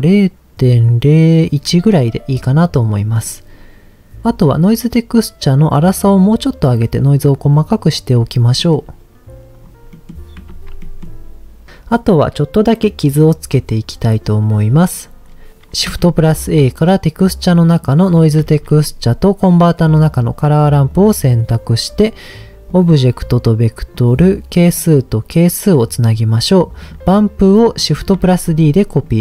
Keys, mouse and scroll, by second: 2.4 middle click, 3.0 middle click, 4.2 middle click, 5.9-8.1 drag, 8.5 middle click, 9.5-9.9 scroll down 2, 9.9 middle click, 10.5 ctrl+s, 10.8 middle click, 11.7 middle click, 14.5-15.5 scroll down 5, 15.9 shift+a, 18.4 shift+a, 21.3 click, 22.7-24.0 drag, 24.7-25.7 drag, 26.1 middle click, 26.8 click, 27.6 click, 27.9 click, 28.3 shift+d, 28.9 click.